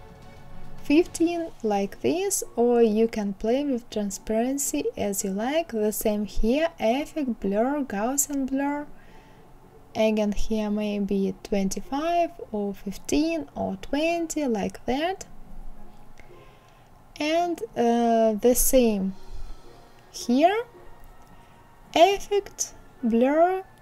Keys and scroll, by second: 9.6 KP_2, 9.9 KP_5, 10.2 Return.